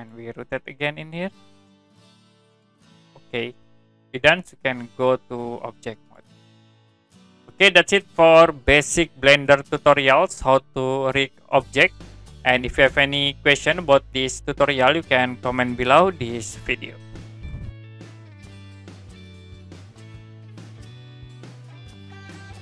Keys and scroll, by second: 17.3 Print.